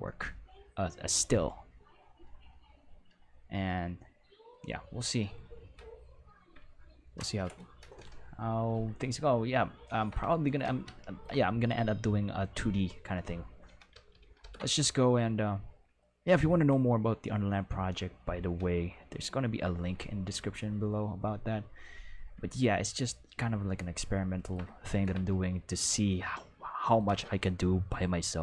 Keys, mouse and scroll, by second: 13.9 ctrl+s, 14.1 ctrl+s, 14.2 ctrl+s, 14.4 ctrl+s, 23.4-28.4 ctrl+middle drag.